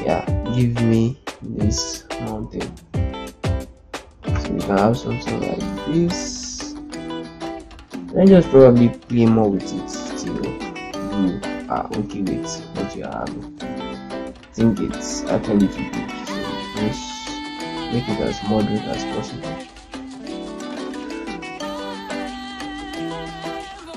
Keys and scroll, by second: 4.6 Down, 5.2 Down, 5.5 Down, 5.6 Down, 5.8 Down, 6.0 Down, 10.9 shift+Up, 11.6 shift+Up, 11.8 shift+Right, 12.5 shift+Right, 13.2 shift+Right, 17.5 shift+Right, 17.7 shift+Right, 17.8 shift+Right, 18.0 shift+Right, 18.1 shift+Right, 18.4 shift+Down, 19.1 shift+Left, 19.6 shift+Down, 19.8 shift+Down, 20.3 shift+z, 22.4 ctrl+space.